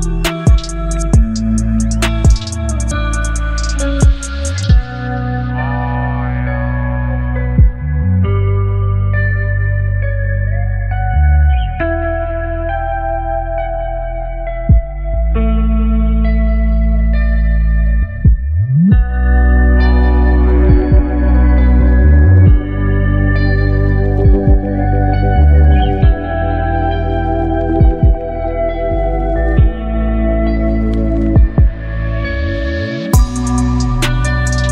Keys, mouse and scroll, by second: 4.4 click, 5.2 right click, 6.4 click, 8.8 v, 9.0 ctrl+t, 11.5-12.5 alt+drag, 14.5-16.1 alt+drag, 20.2 ctrl+0, 22.4 click.